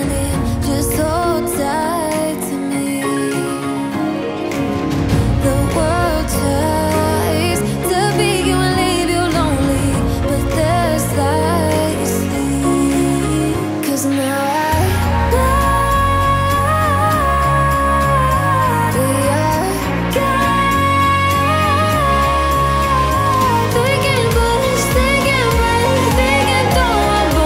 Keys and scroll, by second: 22.1 KP_Add, 24.1 2, 24.4 3, 25.1 space, 26.9-27.4 typing.